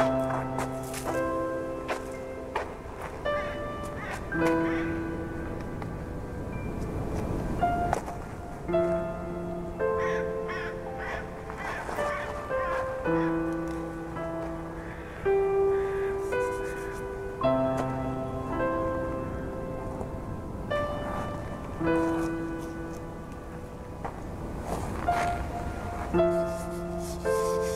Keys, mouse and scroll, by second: 0.1 a, 1.0 shift+middle click, 1.5-1.9 scroll up 3, 1.9 1, 2.3 click, 2.9-4.5 typing, 6.5 scroll down 2, 6.7-8.2 typing, 7.7 Tab, 8.3-8.7 scroll down 1, 8.7-9.7 shift+middle drag, 9.7 scroll up 1, 10.3-11.0 shift+middle drag, 11.0-12.2 scroll up 5, 12.2-12.7 scroll up 1, 12.7-13.7 shift+middle drag, 13.7 click, 14.2 scroll up 1, 14.4 Tab, 15.0 z, 15.7 click, 16.3-17.5 scroll up 3, 17.5 g, 20.7 scroll down 3, 20.9-22.6 typing, 21.7-22.4 scroll down 4, 22.0 Tab, 22.8-23.4 scroll down 1, 23.4 shift+middle click, 24.2-24.6 scroll up 4, 25.1 click, 25.5 Tab, 26.3 scroll down 2, 26.8 z, 27.3 b.